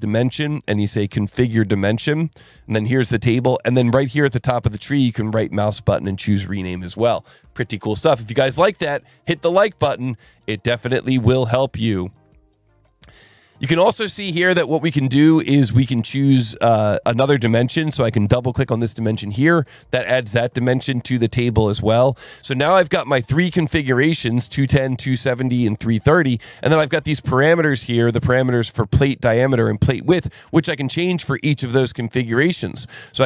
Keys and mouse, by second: 1.6 click, 4.3 alt+1, 4.6 click, 5.2 ctrl+shift+click, 6.9 alt+1, 19.0 click, 22.9 click, 24.3 click, 24.9 click, 25.6 click, 26.7 click, 31.3 click.